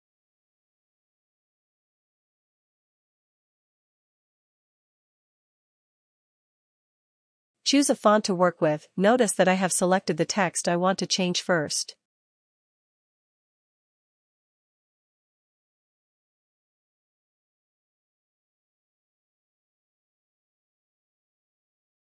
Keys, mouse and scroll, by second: 0.7 click, 0.9 click, 2.4 click, 3.2 click, 3.4 click, 4.0 click, 4.1 click, 4.3 click, 6.1 click, 7.1 click, 12.9 click, 15.1 click, 20.3 click.